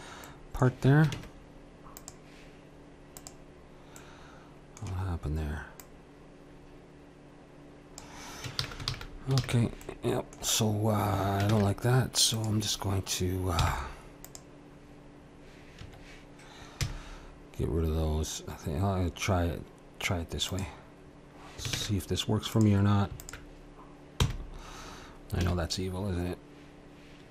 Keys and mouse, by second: 1.1 ctrl+Tab, 3.1-7.7 drag, 8.6 ctrl+z, 8.9 ctrl+z, 9.3 ctrl+z, 9.8-12.4 drag, 11.5 ctrl+Tab, 13.6 c, 16.8 x, 21.7 ctrl+Tab, 23.2-24.2 drag, 24.2 f, 25.4 a.